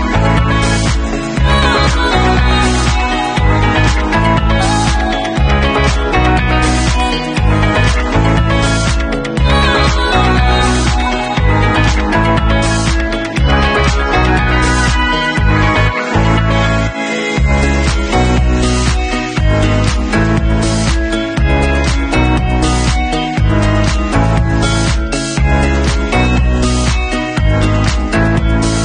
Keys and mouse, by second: 2.4-6.2 middle drag, 6.2-16.2 drag, 16.2 Tab, 16.2 middle click, 16.4 click, 16.5 middle click, 17.3 shift+right click, 17.6 shift+middle click, 18.3-28.4 drag, 21.5 ctrl+shift+f, 28.4-28.8 middle drag.